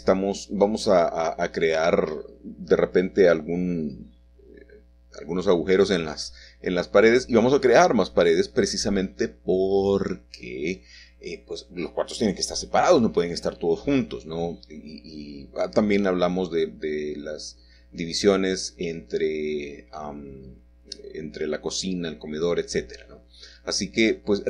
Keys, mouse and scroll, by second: 0.1 click, 0.5 Return, 0.5-1.3 scroll down 4, 0.5 middle click, 0.8 shift+click, 1.1 shift+middle click, 1.6 shift+click, 2.0 scroll down 2, 2.0 f, 2.6 middle click, 3.2 scroll up 1, 3.4 scroll down 1, 3.5 middle click, 4.1 click, 4.7 click, 4.9 shift+click, 5.3 shift+click, 5.8 shift+click, 6.0 f, 6.6 middle click, 6.6 scroll down 1, 7.5 Tab, 7.9 n, 9.9 click, 12.6 click, 14.6 r, 18.4 KP_7, 20.1-21.2 scroll down 1, 22.7 g.